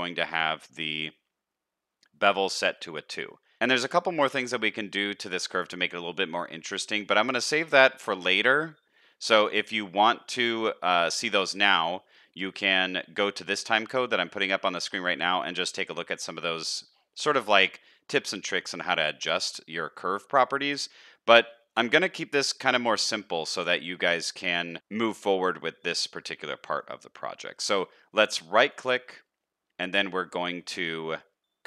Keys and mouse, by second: 5.7 middle click, 21.5 middle click, 25.2 middle click, 27.4 middle click.